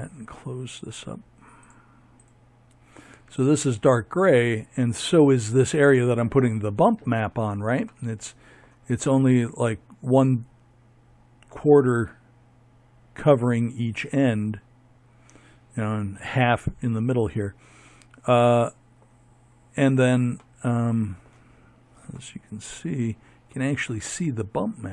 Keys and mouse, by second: 16.1 middle click, 16.4 middle click.